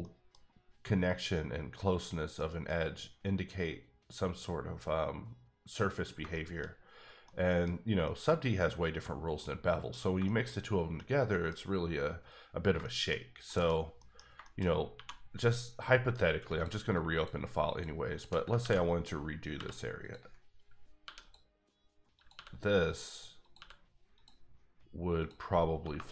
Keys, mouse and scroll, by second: 0.0 middle click, 0.3 scroll down 1, 2.4 middle click, 6.2 shift+middle click, 6.9 scroll down 1, 7.2 middle click, 7.7 scroll up 2, 8.0 shift+middle click, 9.0-9.4 scroll down 2, 9.4 middle click, 13.1 scroll down 1, 13.4 middle click, 13.9 scroll up 1, 14.0 middle click, 14.6 scroll up 1, 14.9 2, 15.9 middle click, 16.5 alt+click, 17.7 alt+shift+double click, 18.1 alt+shift+click, 18.6 ctrl+x, 19.5 k, 20.0 click, 21.0 e, 21.2 click, 22.1 click, 22.3 e, 22.8 click, 23.4 click, 23.5 e, 24.1 click, 25.2 click, 25.9 KP_Enter.